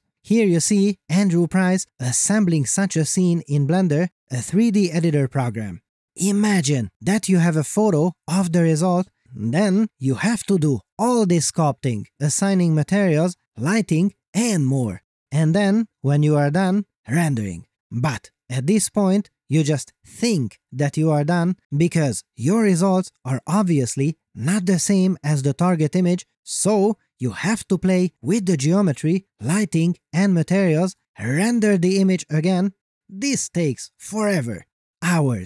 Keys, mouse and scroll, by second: 0.7 click, 2.4 middle click, 2.6 click, 3.0 middle click, 3.2 click, 3.5 middle click, 3.7 click, 4.0 ctrl+z, 4.0 ctrl+z, 4.2 ctrl+click, 4.6 middle click, 4.9 click, 6.1 shift+middle click, 6.5 shift+scroll down 1, 7.1 r, 8.7 click, 9.5 middle click, 9.8 click, 11.2 ctrl+z, 11.3 click, 11.8 ., 11.9 1, 11.9 Return, 12.1 click, 15.3 middle click, 15.4 r, 15.6 z, 16.9 click, 17.2 middle click, 18.7 click, 18.9 middle click, 19.5 g, 19.9 click, 20.2 r, 20.7 click, 21.1 g, 21.5 z, 22.3 right click, 22.6 middle click, 23.1 g, 23.2 g, 33.7 scroll up 1, 34.0 middle click, 34.8 scroll up 1.